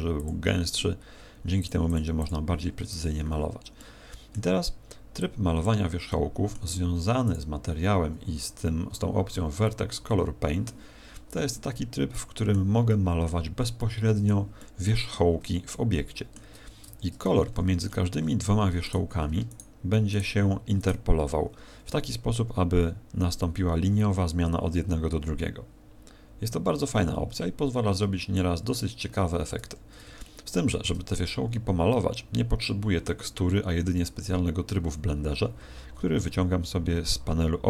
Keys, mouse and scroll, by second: 0.1 click, 1.5 click, 1.9 click, 2.2 click, 2.9 Tab, 3.7 middle click, 5.1 click, 6.1 middle click, 7.3 click, 12.1 middle click, 12.9 middle click, 13.7 middle click, 14.5 middle click, 15.4 shift+middle click, 16.9 Tab, 17.3-18.7 scroll up 15, 18.8 right click, 19.5 shift+right click, 20.2 right click, 20.7 shift+right click, 26.4-28.0 scroll down 9, 28.0 a, 28.5-29.2 scroll down 3, 29.5 Tab, 30.1 shift+middle click.